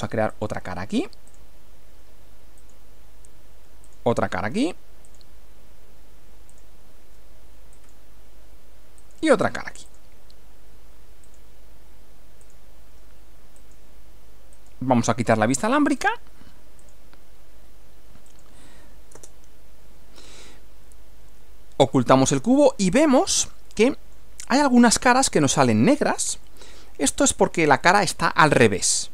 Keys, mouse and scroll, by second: 0.3 ctrl+click, 1.3 ctrl+click, 2.6 click, 3.9 click, 5.1 ctrl+click, 6.5 ctrl+click, 7.7 click, 9.0 click, 9.9 ctrl+click, 11.3 ctrl+click, 12.5 ctrl+click, 13.6 click, 14.5 click, 16.0 click, 16.8 click, 18.3 click, 19.1 space, 20.5-24.3 middle drag, 24.6-25.3 middle drag, 26.5-27.5 middle drag, 27.8-29.1 middle drag.